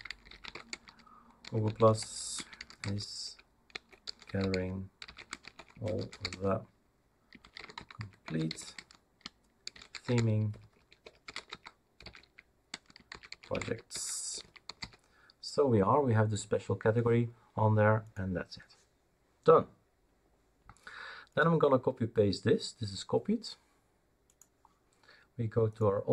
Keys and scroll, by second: 0.0-15.3 typing.